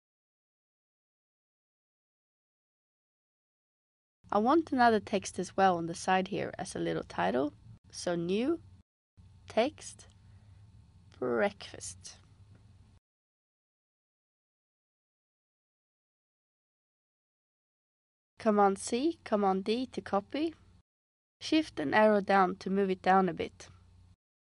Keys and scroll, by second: 10.8-13.3 typing, 18.6 super+c, 19.0 super+d, 21.1 shift+Down, 21.6 shift+Down, 22.1 Down.